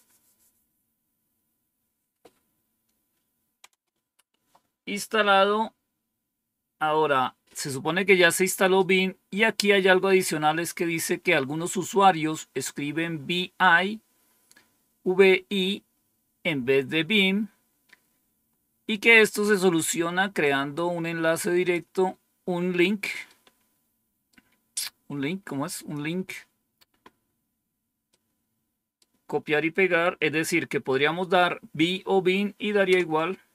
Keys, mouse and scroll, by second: 9.2-10.1 scroll down 1, 20.3-21.7 drag, 23.2-24.2 right drag, 25.6 click, 28.0 right click, 32.8 Return.